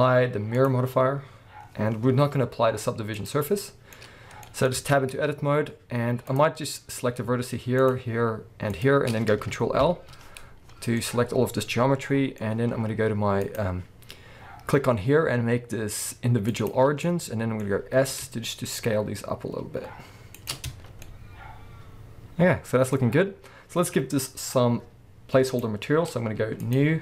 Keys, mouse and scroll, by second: 3.2-6.2 middle drag, 4.0-4.5 scroll up 2, 4.8 Tab, 5.1-5.6 scroll down 1, 5.6 scroll down 1, 5.7-6.2 scroll up 2, 6.2 click, 7.8 shift+click, 8.7 shift+click, 9.8 ctrl+l, 11.0-13.4 middle drag, 13.4-17.0 drag, 17.0 middle click, 17.9 s, 20.5 shift+click, 20.7 Tab, 21.0 middle click, 25.5 click, 26.6-27.0 drag.